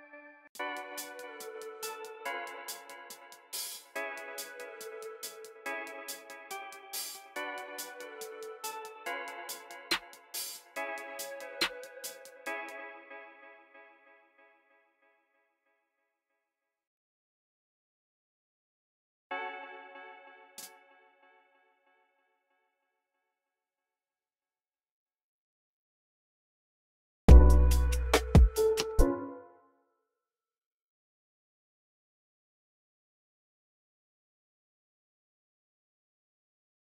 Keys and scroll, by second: 4.2-5.0 typing, 7.5 super+c, 8.2 super+r, 8.4 typing, 12.4 space, 16.0-16.8 typing, 21.2 typing, 22.4 BackSpace, 25.4 ctrl+super+r, 25.8-27.0 typing, 26.1 super+a, 28.8 space, 29.2 u, 29.8 ctrl+super+r, 30.0 c, 31.3-34.3 typing.